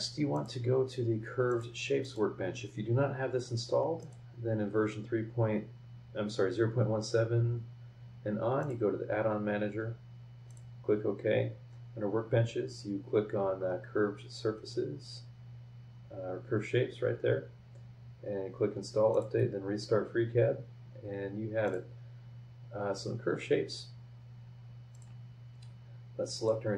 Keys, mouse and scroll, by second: 0.3 click, 1.5 click, 2.0 click, 4.0 click, 8.6 click, 10.5 click, 13.6-14.0 scroll down 4, 14.0 scroll up 2, 14.4 scroll down 2, 19.1 click, 20.1 scroll up 2, 20.5 scroll down 2, 21.6 click, 23.7 scroll up 2, 24.9 click, 26.3 click.